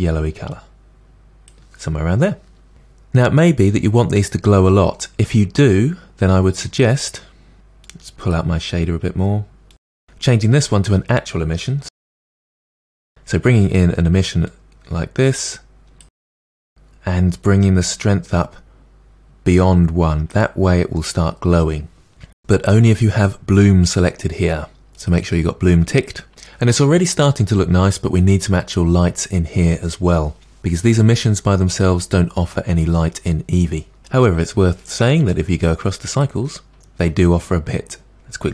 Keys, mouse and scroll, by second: 8.2-10.0 drag, 14.5 click, 17.7-20.7 drag, 26.3-36.2 middle drag, 36.2-37.3 drag.